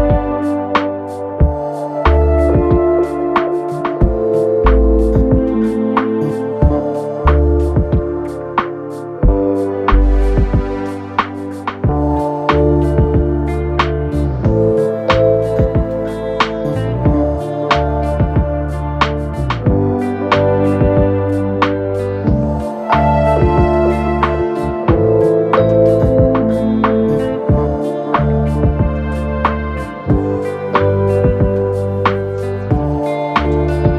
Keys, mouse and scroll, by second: 2.3 Up, 18.4 Up, 21.9 Down, 22.1 Down.